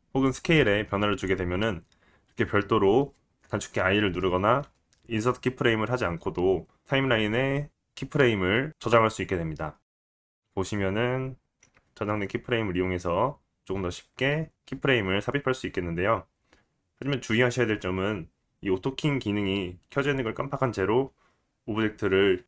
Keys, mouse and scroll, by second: 10.4-22.4 drag, 15.0 space.